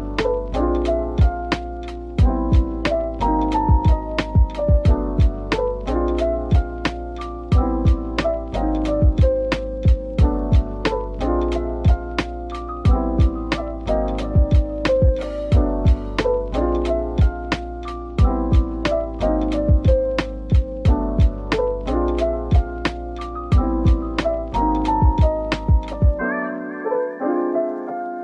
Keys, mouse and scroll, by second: 0.4-1.1 scroll down 1, 1.1 typing, 1.9 middle click, 7.1 typing, 8.0 middle click, 8.8-9.2 scroll down 1, 9.3 shift+right click, 9.8 a, 13.1 scroll down 1, 13.8 typing, 15.5-16.0 typing, 17.4-18.1 scroll up 1, 18.1-18.5 typing, 19.5 middle click, 20.3-21.2 typing, 22.5 typing, 24.3 middle click, 26.3 Tab, 27.0 typing, 27.6 Tab, 28.1 Tab.